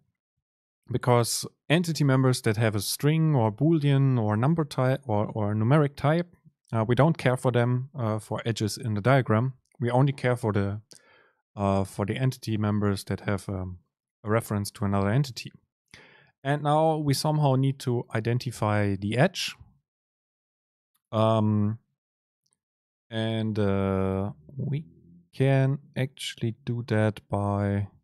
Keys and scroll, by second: 0.4 Up, 15.1 Down.